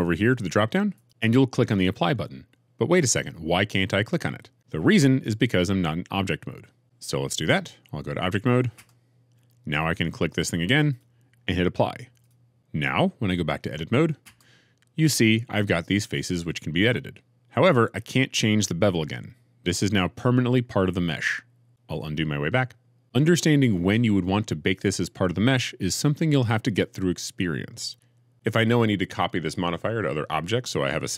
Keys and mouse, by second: 0.9-6.8 drag, 8.7 Tab, 14.2 Tab, 21.9 ctrl+z, 22.3 ctrl+z.